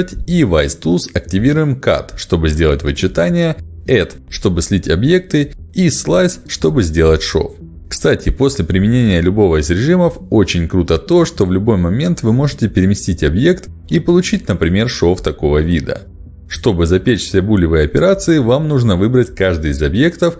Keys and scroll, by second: 4.1 ctrl+shift+x, 6.2 ctrl+shift+x, 17.1 ctrl+alt+x.